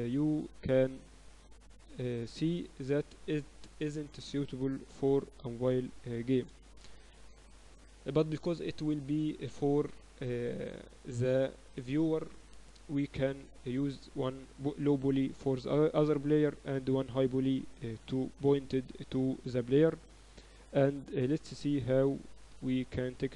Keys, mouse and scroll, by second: 2.1-3.6 drag, 3.6 middle click, 4.2-6.0 right drag, 6.4-8.4 drag, 8.4 ctrl+s.